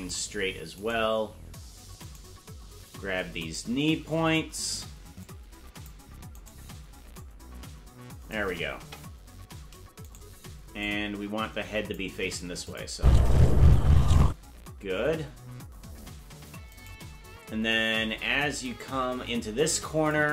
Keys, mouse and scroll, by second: 1.0 right click, 2.4 right click, 3.6 shift+right click, 5.2 click, 6.6 right click, 7.1-8.3 drag, 8.7 KP_0, 10.2 right click, 10.8-12.0 drag, 12.7 click, 12.9 space, 14.3 space, 16.9 right click, 18.6-20.1 drag.